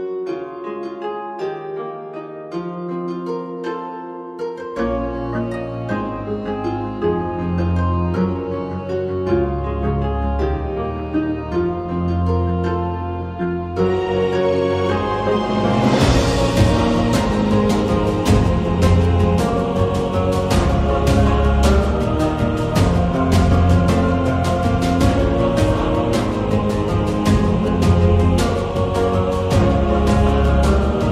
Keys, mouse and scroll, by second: 1.9 shift+d, 4.1 middle click, 4.8 s, 7.9 middle click, 9.0 Tab, 10.1 g, 11.8 Tab, 12.0 middle click, 12.3 Tab, 12.6 click, 13.5 3, 14.2 g, 16.2 Tab, 16.4 middle click, 16.9 shift+Tab, 17.8-19.6 drag, 20.3 middle click, 21.4 g, 23.4 shift+Tab, 23.6 middle click, 24.0 g, 27.2 middle click, 28.2 click, 28.5 shift+middle click, 29.2 g, 31.0 a.